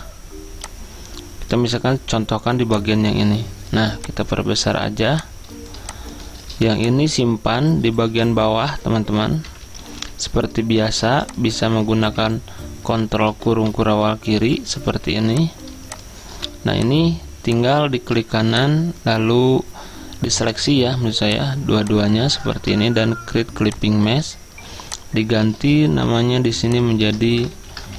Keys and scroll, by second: 4.3 v, 5.2 z, 8.0 ctrl+z, 9.3-10.1 typing, 10.9 ctrl+x, 14.9 z, 16.2-16.9 typing, 22.6 ctrl+z, 26.0 t, 27.1 ctrl+a, 27.5-27.9 typing.